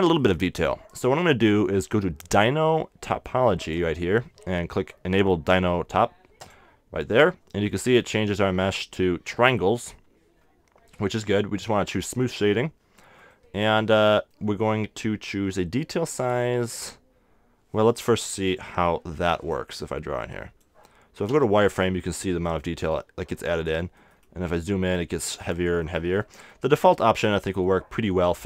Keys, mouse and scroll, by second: 3.6-5.5 drag, 6.4-8.2 drag, 8.2-12.4 middle drag, 12.4-14.1 drag, 13.3 middle click, 14.1-17.0 middle drag, 18.7 f, 19.5-21.9 drag, 21.3 z, 22.9-24.5 drag, 27.1 super+z, 27.6 super+z, 27.6 middle click, 28.2 middle click.